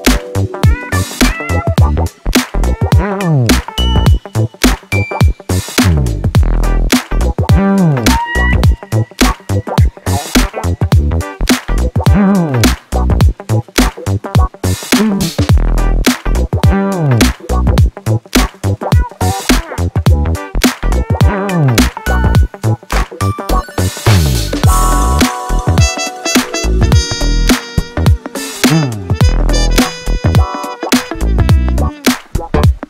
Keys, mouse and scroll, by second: 1.0 click, 2.4 click, 2.7-3.1 scroll up 1, 3.3-3.9 scroll down 1, 4.4 click, 5.0-6.1 drag, 7.1 click, 7.6 scroll down 2, 7.8-8.3 scroll up 2, 8.8-9.2 scroll up 1, 9.9 click, 11.6 click, 12.0-12.4 scroll up 1, 12.4-12.7 scroll down 1, 12.9 click, 14.7 click, 15.3 click, 16.3 click, 16.8 click, 17.2-18.2 drag, 18.6 click, 20.1 click, 20.9 click, 22.0-23.4 drag, 24.1-25.6 drag, 25.9 click, 27.0-27.5 scroll up 2, 28.4 click, 29.1 click, 30.1 s, 32.2-32.8 drag.